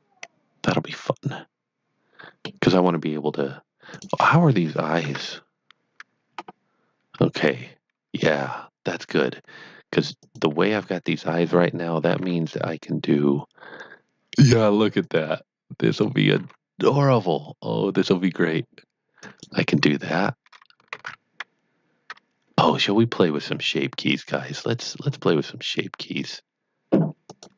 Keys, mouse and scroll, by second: 3.9 click, 5.0 Tab, 6.3 scroll up 1, 7.3-9.3 scroll down 1, 10.1 scroll down 1, 10.2 click, 11.0 click, 11.9-12.7 typing, 15.0 right click, 16.0 click, 16.1-16.9 typing, 19.2 click, 27.2 click.